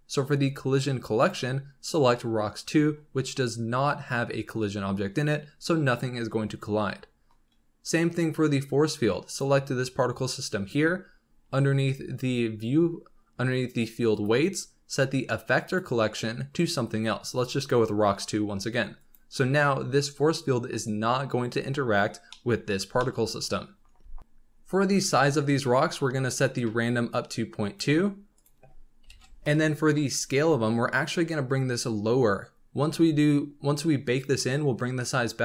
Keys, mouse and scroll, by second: 1.1-4.2 drag, 9.2 click, 11.1-13.4 scroll down 20, 14.1-14.5 drag, 14.5-15.6 scroll down 3, 15.6-18.7 drag, 18.9-21.7 drag, 21.7-22.2 scroll down 5, 22.2 scroll up 1, 22.3-24.2 middle drag, 24.2-26.4 scroll up 7, 26.4-31.3 drag.